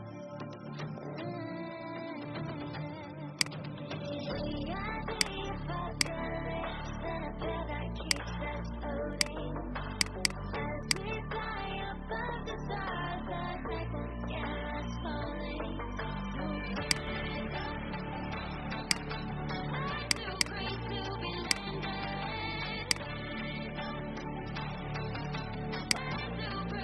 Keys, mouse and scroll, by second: 7.2 ctrl+c, 7.9 click, 11.5 ctrl+f, 16.8 click, 26.7 ctrl+z.